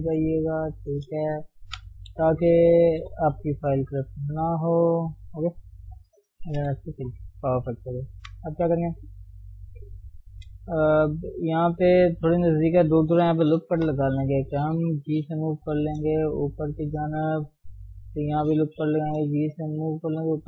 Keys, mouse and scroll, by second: 1.0 ctrl+shift+s, 1.4 scroll down 1, 1.7 KP_1, 1.9-2.3 scroll up 1, 2.3 shift+middle click, 2.5 scroll up 1, 2.8 Tab, 3.1 shift+middle click, 3.4-4.3 scroll down 1, 4.3 middle click, 5.1-5.7 scroll up 1, 5.7 KP_3, 6.6 f, 7.0-7.3 scroll down 1, 7.3 shift+middle click, 8.1 KP_1, 8.8 shift+middle click, 9.0-9.7 scroll up 3, 9.7 click, 10.3 shift+middle click, 10.6 scroll down 1, 10.6 a, 11.7 click, 13.6 ctrl+r, 15.1 g, 17.9 ctrl+r, 19.0 g.